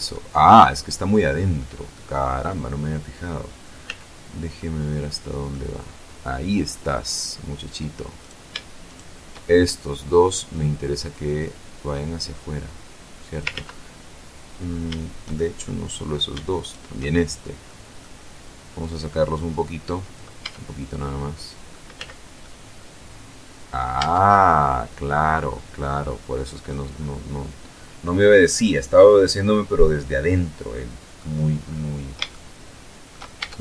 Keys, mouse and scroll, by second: 1.4 click, 3.3 z, 4.0 click, 4.2 middle click, 6.1-6.6 scroll up 2, 7.6 right click, 8.3 shift+right click, 8.9 shift+middle click, 10.5-13.0 drag, 13.0 ctrl+z, 14.8 shift+middle click, 14.9 shift+click, 16.0 shift+right click, 17.1 middle click, 17.3-17.6 scroll up 1, 17.6-18.2 scroll down 1, 18.2-19.8 drag, 19.8 Tab, 20.3-21.3 middle drag, 21.3 z, 21.9-23.4 middle drag, 23.4 Tab, 24.3-26.3 drag, 28.0-30.8 middle drag, 31.0-31.6 scroll up 2, 31.7-32.7 shift+drag, 32.8 shift+Tab.